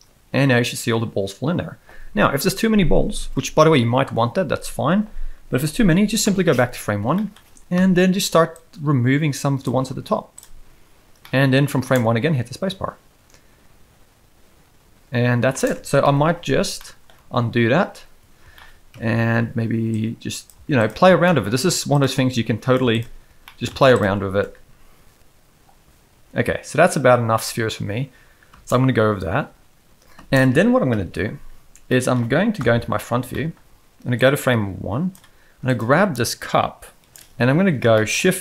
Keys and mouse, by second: 3.1 space, 6.2 shift+Left, 7.1 shift+middle click, 7.7 KP_1, 8.7-9.6 drag, 9.7 x, 11.2-11.7 middle drag, 11.8 space, 15.5 space, 16.0 shift+Left, 16.8-17.1 middle drag, 17.2 ctrl+z, 17.9 ctrl+z, 18.5 shift+middle click, 18.9 KP_1, 20.0-20.4 drag, 20.5 x, 21.2 shift+middle drag, 21.9 z, 22.3 click, 23.4 middle click, 23.4 x, 24.1 z, 24.3 space, 27.3 middle click, 28.5 space, 31.9 middle click, 32.5 KP_1, 33.3 shift+middle drag, 34.1-35.1 drag, 35.6 click, 38.0 shift+middle click.